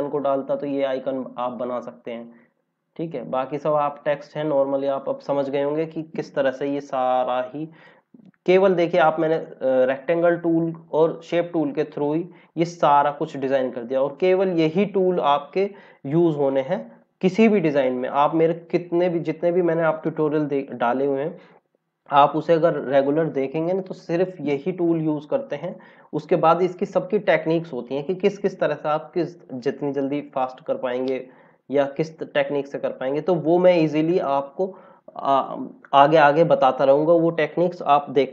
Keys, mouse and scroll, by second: 0.0 click, 0.5 scroll up 1, 2.7 scroll down 1, 7.7 click, 13.3 scroll up 1.